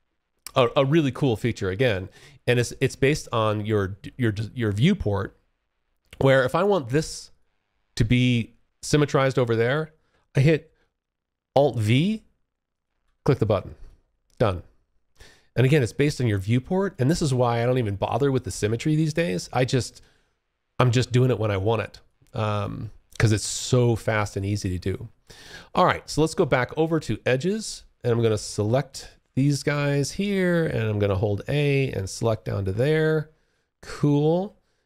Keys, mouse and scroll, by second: 0.0 Escape, 6.5 alt+click, 11.0-12.2 alt+v, 12.7 alt+click, 14.7 alt+click, 16.3 alt+middle click, 18.1 alt+click, 21.2 alt+click, 21.9 alt+middle click, 23.9 alt+click, 25.5-26.4 `, 28.1 click, 28.6 alt+click, 30.5-31.3 a, 31.8 alt+click, 32.9 alt+middle click.